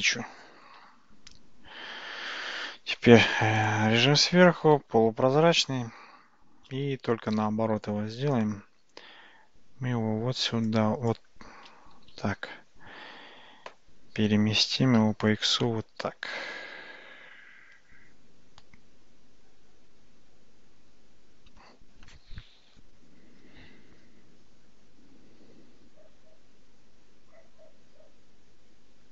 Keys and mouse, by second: 0.8 Tab, 3.0 `, 5.0 alt+z, 7.4 g, 12.0 g.